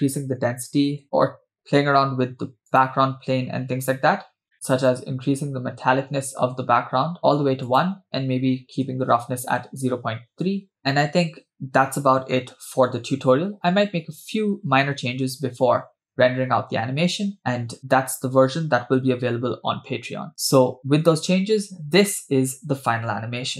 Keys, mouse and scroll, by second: 1.0 space, 2.7-4.4 drag, 4.9-7.3 drag, 7.6-9.7 drag, 10.8 scroll down 1, 10.8 space, 10.9 space, 13.0 space, 13.8 space.